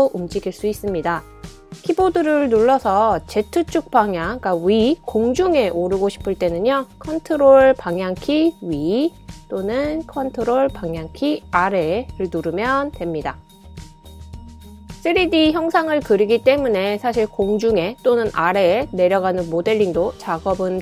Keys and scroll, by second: 0.3 Left, 0.7 Left, 0.8 Left, 0.9-3.6 Left, 7.1 super+Up, 7.4 super+Up, 8.7 super+Down, 9.0 super+Down, 9.2 super+Down.